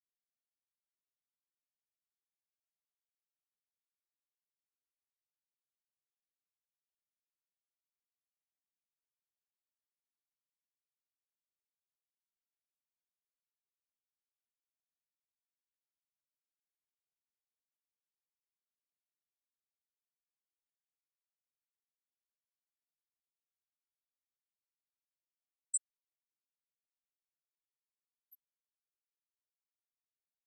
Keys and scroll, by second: 3.9 ctrl+Home.